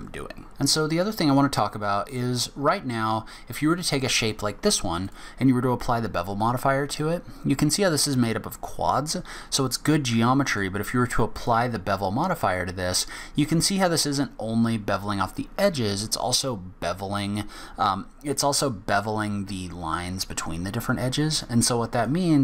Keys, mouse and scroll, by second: 1.7-2.2 scroll down 5, 2.7-3.1 scroll up 4, 3.3 scroll down 1, 3.7 middle click, 4.4 scroll up 1, 5.0 click, 10.4 click, 18.4 scroll up 1, 22.1 click.